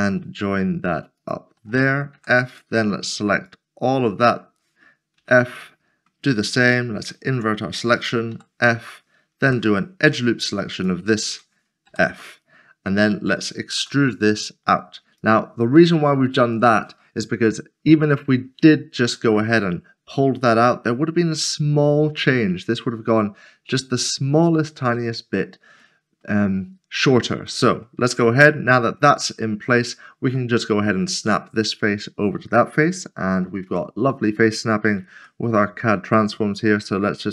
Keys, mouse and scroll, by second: 0.0 f, 1.7 shift+click, 2.5 f, 2.7 middle click, 3.5 click, 5.6 f, 5.8 middle click, 8.3 typing, 9.5 typing, 11.7 alt+click, 12.2 middle click, 15.2 click, 15.7 middle click, 25.8 middle click, 28.0 Tab, 28.5 middle click, 33.7 alt+c, 35.2 g, 36.3 g, 36.5 middle click.